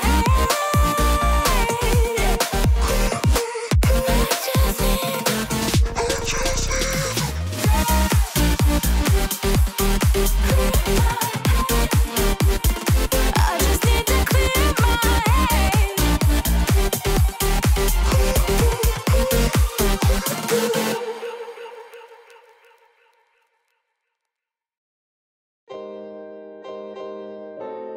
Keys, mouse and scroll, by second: 2.5 ctrl+click, 9.1 ctrl+Down, 9.8 ctrl+Return, 10.6 ctrl+click, 11.1 ctrl+click, 12.1 ctrl+c, 12.4 ctrl+click, 13.3-21.4 ctrl+drag, 21.9-23.3 ctrl+drag, 24.7 ctrl+Return, 26.2-26.9 scroll up 4, 27.8 ctrl+click.